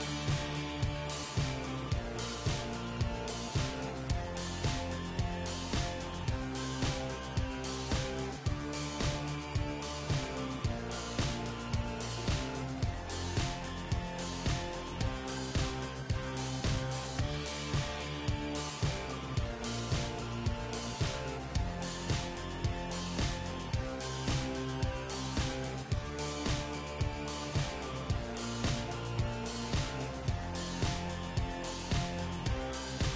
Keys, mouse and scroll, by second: 0.5 Tab, 0.7-2.5 right drag, 1.2 g, 3.1-5.5 middle drag, 5.0 g, 5.9-8.8 middle drag, 6.4 g, 8.8 s, 10.4 s, 11.8 g, 13.0-14.6 middle drag, 15.5 middle click, 16.1 x, 17.6 KP_1, 19.5-21.4 drag, 19.7 shift+a, 24.3 s, 25.4 middle click, 26.3 KP_3, 26.7 Tab, 27.7 w, 28.6-30.5 middle drag, 28.9 Tab, 29.3 g, 31.6 x, 31.6 z, 31.8 middle click, 32.7 r.